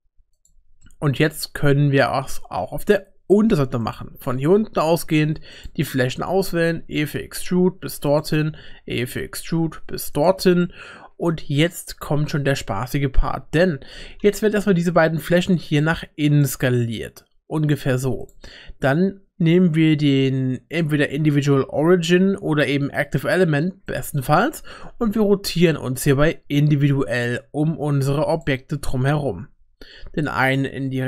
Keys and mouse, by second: 0.8 middle click, 2.0 middle click, 3.8 click, 5.6 shift+click, 6.3 e, 8.3 e, 10.6 middle click, 13.9 s, 18.2-24.0 drag, 24.9 r.